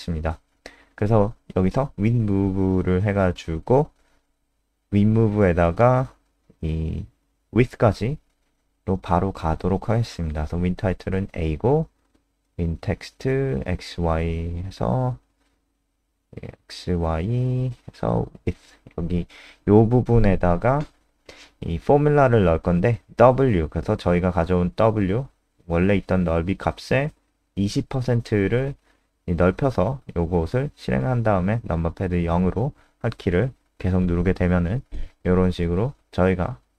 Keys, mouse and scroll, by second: 1.1-8.6 typing, 5.0 Tab, 14.5 click, 18.6 BackSpace, 18.8 BackSpace, 20.2-20.6 typing, 24.3-25.0 typing, 26.2 click, 27.4 F5, 29.4 click, 33.3 KP_0.